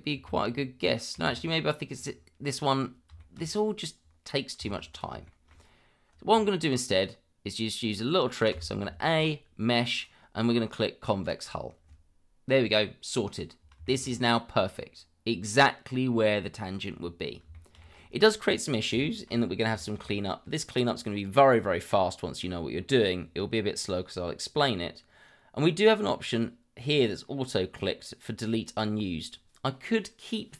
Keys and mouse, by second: 1.1 ctrl+z, 3.2 shift+middle drag, 4.9 click, 5.2 shift+middle drag, 8.5 a, 9.0 shift+middle click, 10.0-11.3 drag, 13.8 shift+middle click, 17.5 shift+middle click, 19.1 shift+middle click, 19.8 shift+middle click, 28.5 click.